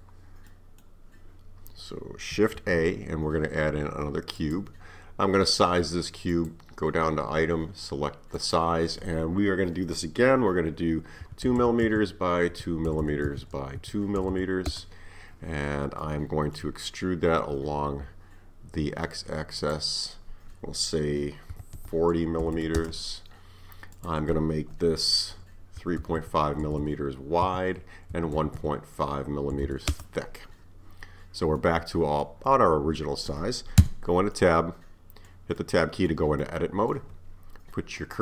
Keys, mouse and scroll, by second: 0.5-2.6 middle drag, 2.6 shift+a, 6.3 click, 8.4-11.4 drag, 11.6 m, 13.0 m, 14.3 m, 16.0-19.1 middle drag, 19.6-22.6 drag, 22.6 m, 23.9-26.9 drag, 26.9 m, 29.7 m, 31.0 scroll up 5, 31.6-33.8 middle drag, 33.8 Tab, 34.4-38.2 middle drag.